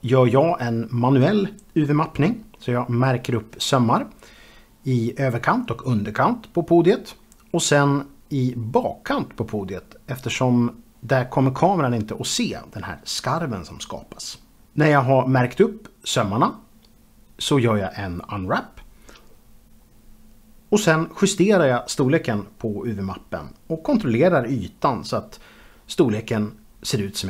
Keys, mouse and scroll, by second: 1.2 2, 2.4 click, 5.8 click, 7.5 click, 10.2 alt+click, 11.3 alt+shift+click, 12.4 u, 13.2 click, 14.7 a, 15.1 ctrl+alt+q, 15.4 ctrl+space, 17.1 u, 17.6 click, 18.5 middle click, 18.9 click, 19.9 click, 20.1 g, 20.4 click, 20.8 b, 21.7 click, 21.8 scroll up 3, 21.9 shift+middle click, 22.1 s, 22.3 click, 22.3 middle click, 22.4 scroll down 1, 22.6 scroll up 1, 23.0 click, 23.2 shift+middle click, 23.7 g, 24.4 click, 24.5 scroll up 3, 25.0 click, 25.2 scroll down 1, 25.9 middle click, 25.9 scroll up 2, 26.0 middle click, 26.1 shift+middle click, 26.5 click, 26.6 shift+middle click, 26.6 shift+double middle click, 27.1 r.